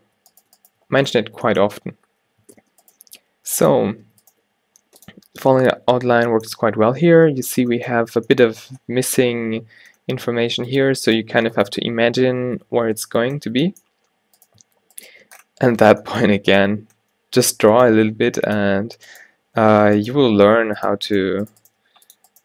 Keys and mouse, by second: 2.5 alt+w, 3.2 g, 4.0 Tab, 4.3 Tab, 4.5 g, 5.5 a, 5.7 a, 10.8-13.0 drag, 11.3-13.0 typing, 14.5-17.0 drag, 17.5 alt+w, 18.0 g, 19.8 alt+w, 20.2 g, 21.4 g, 21.7 g.